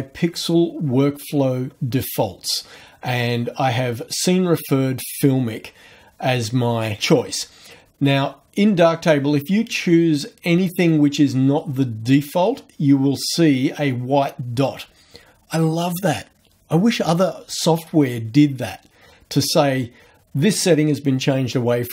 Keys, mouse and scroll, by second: 7.0 click, 10.7 click, 12.1 click.